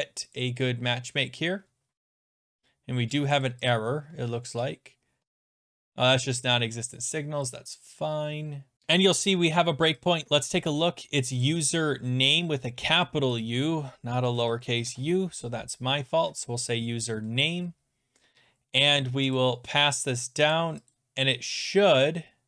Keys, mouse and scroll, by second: 0.4 click, 2.6 click, 3.4 click, 3.7 click, 4.0-4.4 scroll down 13, 5.5 click, 5.6 click, 7.0 click, 7.5 click, 10.1 click, 10.7 click, 13.4 click, 14.2 Delete, 14.8 u, 19.4 click, 20.1 click, 20.5 click, 20.9 click, 21.6 click.